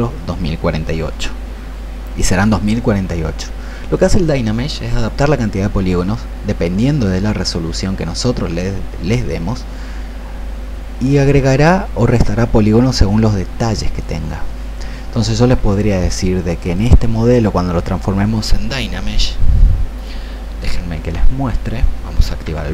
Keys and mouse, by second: 20.9 ctrl+2.